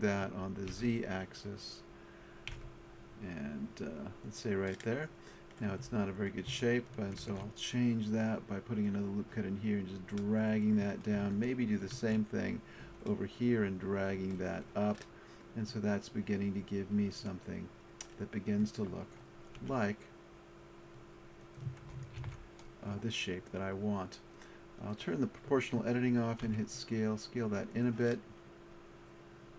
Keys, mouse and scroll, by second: 6.1 middle click, 7.2 ctrl+r, 11.8 click, 11.9 ctrl+r, 14.6 click, 19.6 s, 21.4 click, 22.2 ctrl+z, 26.5 s, 27.7-29.5 drag.